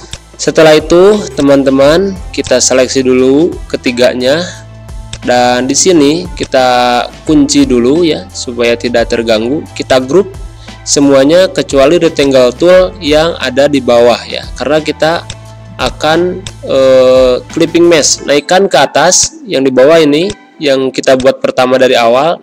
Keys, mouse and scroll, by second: 0.0 click, 3.7 ctrl+g, 5.0-7.9 drag, 7.9 ctrl+a, 9.8 ctrl+click, 11.1 ctrl+g, 12.1-13.5 drag, 13.5 ctrl+z, 15.2-18.4 drag, 18.4 ctrl+z, 19.1-22.4 drag.